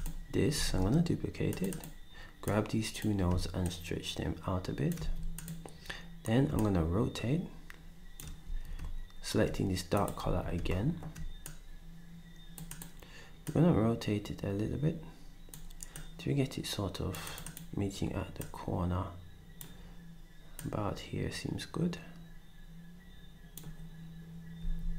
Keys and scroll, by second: 0.7 d, 5.0 ctrl+s, 8.5 d, 10.2 s, 24.6 s.